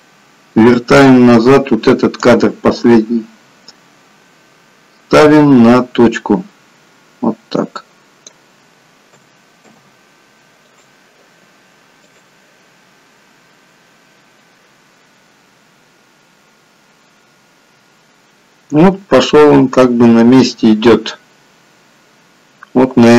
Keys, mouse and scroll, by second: 2.2 click, 9.2 a, 9.7 i, 12.1 click.